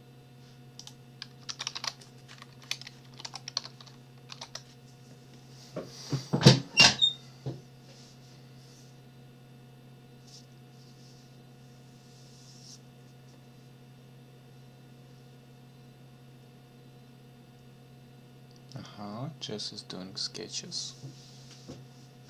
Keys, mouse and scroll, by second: 0.8 click, 1.5 ctrl+s, 1.7 ctrl+alt+Tab, 2.5 Up, 3.0 space, 3.2 -, 3.5 j, 4.3 4.